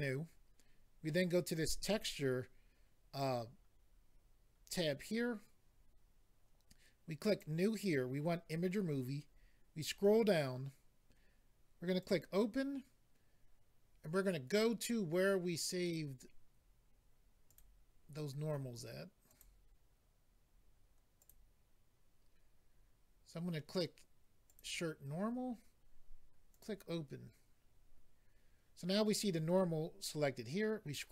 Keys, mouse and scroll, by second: 1.9 click, 2.0 click, 7.2 click, 7.4 click, 8.9-9.9 scroll down 4, 12.0 click, 12.1 click, 14.5 click, 14.6 click, 15.8 click, 15.9 click, 17.4 click, 17.5 click, 19.2 click, 19.3 click, 21.1 click, 21.2 click, 24.5 click, 24.6 click, 26.5 click, 26.6 click, 30.3-31.1 scroll down 4.